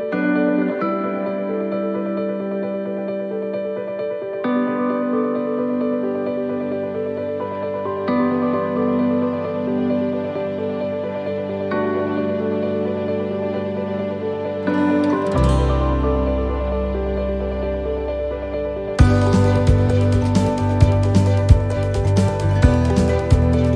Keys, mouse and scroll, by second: 2.9 click, 6.5-6.8 scroll down 3, 6.8 middle click, 7.4 scroll up 1, 7.9 middle click, 9.4 click, 14.0 middle click, 15.4-15.8 scroll up 3, 16.0 middle click, 16.0-17.0 scroll up 2, 17.9 scroll down 1, 18.3 middle click, 18.6-19.0 scroll down 4, 19.3 shift+middle click, 20.0 scroll down 1, 20.4 shift+middle click, 20.8 scroll up 2, 21.3 shift+middle click.